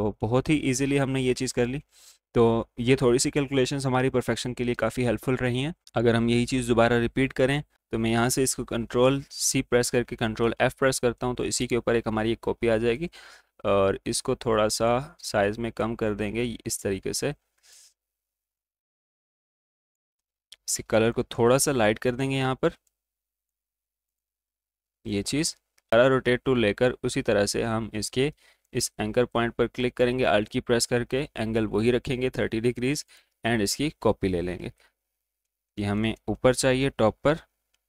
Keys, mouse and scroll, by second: 0.4 click, 1.2 alt+scroll up 1, 1.4 space, 1.4 click, 5.8 click, 7.7 ctrl+z, 8.6 ctrl+c, 10.8-15.9 drag, 15.9-21.2 drag, 21.2 click, 23.6 click, 28.5 click, 33.0 click, 36.0 ctrl+shift+], 37.1 ctrl+d.